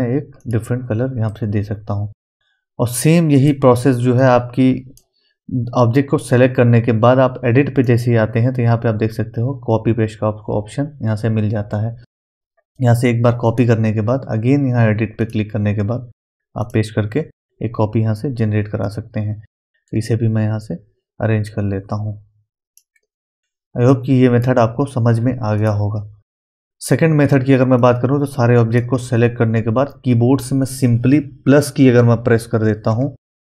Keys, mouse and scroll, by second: 0.4 click, 1.3-3.3 middle drag, 3.3-7.3 drag, 7.8 click, 13.5 click, 13.5 click, 18.8-23.4 drag, 23.4 scroll down 1, 23.9-25.6 middle drag, 25.6 click, 27.8-31.2 drag, 31.0 typing.